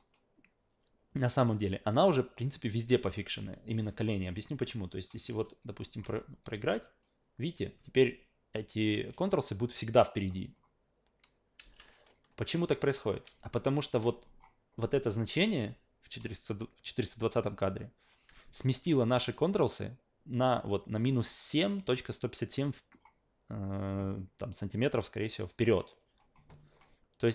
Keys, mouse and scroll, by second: 5.0 drag, 5.5 alt+right click, 5.8 alt+middle click, 6.1 alt+v, 6.3 alt+right drag, 6.6 alt+click, 10.3 alt+middle click, 11.6 alt+v, 12.1 alt+middle click, 13.3 alt+middle click, 14.2 drag, 20.8 click, 22.9 click, 26.8-27.3 alt+right drag.